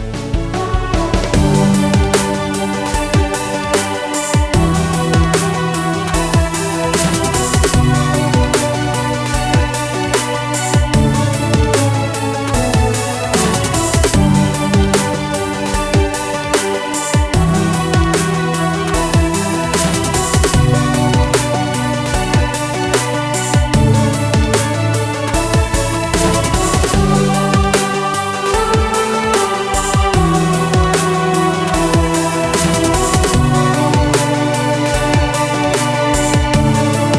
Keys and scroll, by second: 3.2 F9, 12.7 typing, 12.8 Return, 16.4 typing, 16.9 ctrl+w, 20.1 ctrl+a, 20.6-23.8 typing, 25.6 Delete, 26.7 ), 26.8 ), 27.0 Return.